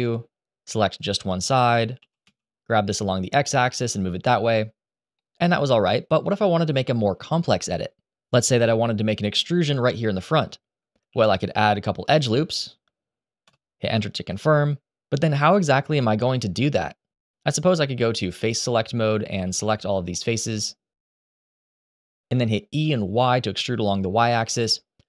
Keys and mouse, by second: 0.5 click, 1.7 g, 1.9 x, 3.4 click, 3.9 z, 6.1 click, 10.8 ctrl+r, 13.2 Return, 17.2 3, 17.4 click, 17.9 alt+a, 18.1 click, 18.6 ctrl+z, 19.0 click, 19.8 b, 20.2 click, 20.9 shift+click, 21.5 middle click, 22.2 e, 22.5 y, 24.3 click.